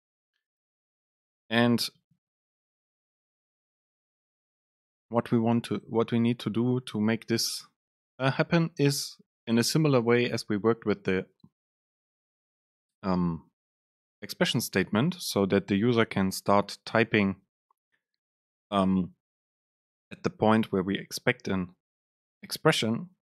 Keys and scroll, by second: 2.1 BackSpace.